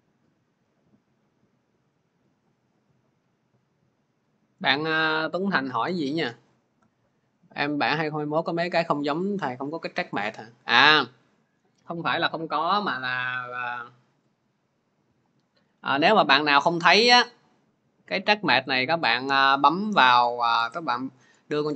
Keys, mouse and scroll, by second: 3.6 click, 4.6 click, 11.5 click, 18.5 right click, 20.6 right click.